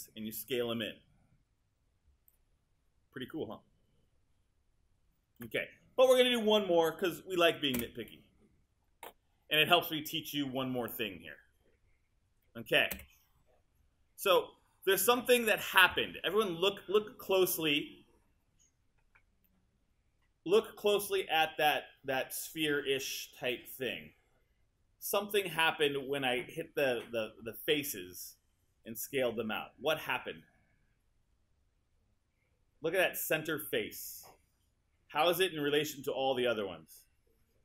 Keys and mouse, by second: 7.8 space, 13.0 space, 15.2 click, 15.8 click.